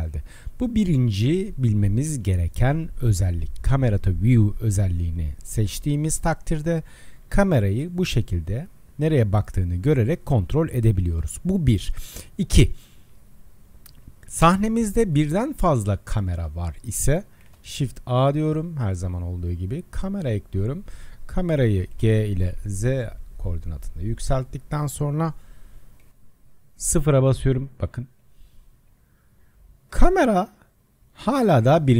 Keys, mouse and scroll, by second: 0.2-1.2 drag, 1.2-4.2 middle drag, 5.2-10.7 middle drag, 13.9 click, 14.4 KP_0, 15.3-16.0 scroll down 11, 16.0-16.5 scroll up 2, 16.5-17.5 middle drag, 17.5 shift+a, 21.9 g, 26.1 KP_0, 28.4 KP_0, 28.9 KP_0, 29.5 KP_0, 29.9 KP_0, 31.0 KP_0, 31.4 KP_0.